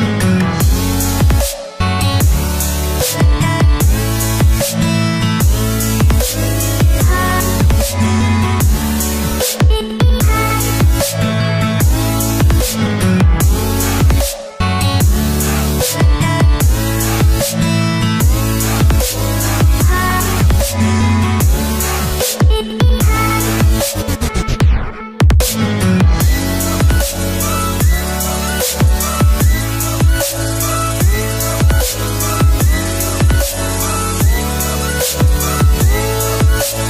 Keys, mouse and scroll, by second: 23.6 click, 26.4-32.3 shift+drag, 34.0-35.2 shift+drag, 36.2-36.8 drag.